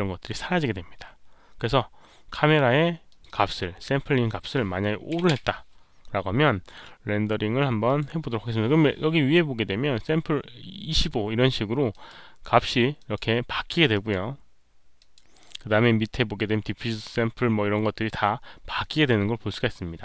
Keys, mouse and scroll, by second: 3.0 click, 5.0 KP_5, 5.3 Return, 7.8 Return, 7.8 click, 7.8 KP_5, 11.8 Return, 11.8 click, 11.8 KP_5, 12.9 click, 13.8 click, 14.9 click, 18.7 click.